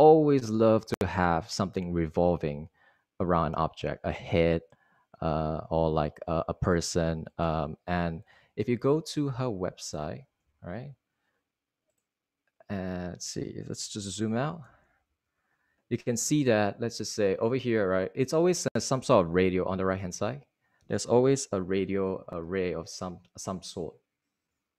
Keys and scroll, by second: 7.7 Right, 8.2 Right, 9.3 super+Right, 11.9 ↻, 15.0 super+-, 15.1 super+-.